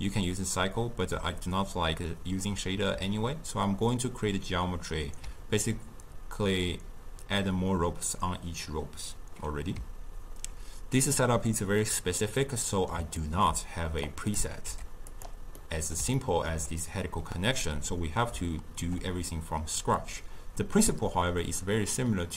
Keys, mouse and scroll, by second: 12.5-14.1 middle drag, 14.1-14.7 drag, 14.7 g, 15.7-19.3 middle drag.